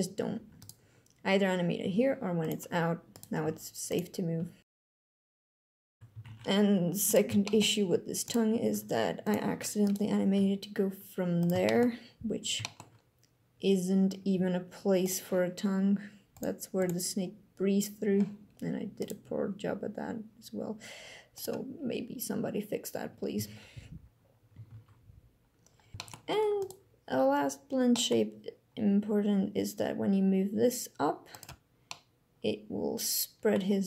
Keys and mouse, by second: 1.5 g, 2.1 click, 3.1 g, 3.6 click, 4.1 g, 4.9 alt+g, 5.0 alt+r, 5.6 a, 5.9 alt+g, 6.0 alt+r, 7.1 shift+drag, 8.3 r, 8.4 x, 8.9 click, 10.0 g, 11.3 shift+click, 12.4 click, 14.0 g, 14.7 click, 19.9 g, 23.6 a, 25.0 alt+g, 25.6 alt+r, 27.6 drag, 28.5 g, 31.7-33.2 drag.